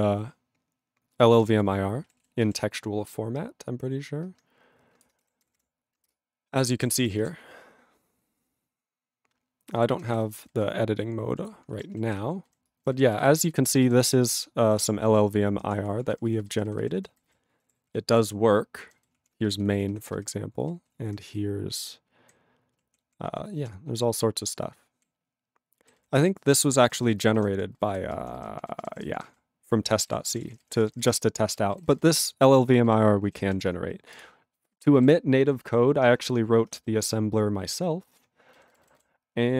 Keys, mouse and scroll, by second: 1.5 ctrl+g, 2.2 ctrl+s, 6.2 ctrl+Return, 6.6 ctrl+=, 9.8 ctrl+g, 9.9 ctrl+n, 12.4 ctrl+n, 13.9 ctrl+space, 14.0 ctrl+p, 16.0 ctrl+g, 16.1 ctrl+n, 17.6 ctrl+=, 17.8 ctrl+p, 18.0 ctrl+p, 18.8 ctrl+n, 19.1 ctrl+p, 19.5 alt+f, 19.6 alt+f, 20.5 alt+b, 21.2 ctrl+n, 22.7 ctrl+e, 23.0 ctrl+p, 23.2 ctrl+a, 23.6 ctrl+e, 23.7 ctrl+p, 24.2 ctrl+p, 25.8 ctrl+n, 25.9 ctrl+n, 26.1 ctrl+space, 26.1 ctrl+e, 26.9 ctrl+n, 27.2 ctrl+space, 27.3 ctrl+a, 27.5 ctrl+p, 27.7 ctrl+n, 27.9 ctrl+n, 28.0 ctrl+p, 28.2 ctrl+p, 28.3 ctrl+n, 28.5 ctrl+p, 28.6 ctrl+n, 28.7 ctrl+p, 28.8 ctrl+n, 28.9 ctrl+p, 28.9 ctrl+n, 29.1 ctrl+p, 29.1 ctrl+n, 29.2 ctrl+p, 29.9 ctrl+g, 30.0 ctrl+e, 30.3 ctrl+p, 30.3 ctrl+a, 30.4 ctrl+space, 30.5 ctrl+e, 30.6 ctrl+n, 30.6 ctrl+e, 30.9 ctrl+n, 31.0 ctrl+n, 31.1 ctrl+g, 31.4 ctrl+p, 31.5 ctrl+a, 31.7 ctrl+n, 31.8 ctrl+n, 31.9 ctrl+space, 32.0 ctrl+n, 32.5 ctrl+n, 32.8 ctrl+g, 34.2 Return.